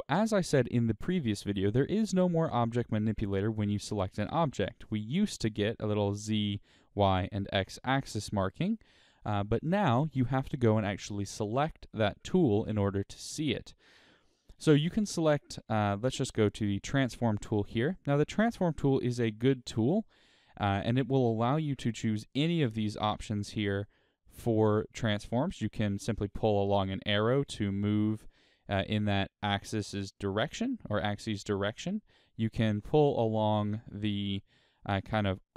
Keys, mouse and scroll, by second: 16.7 click, 18.2-19.0 scroll up 1, 19.0-25.7 middle drag, 25.7-27.2 drag, 27.2 right click, 30.2 click, 30.9 right click.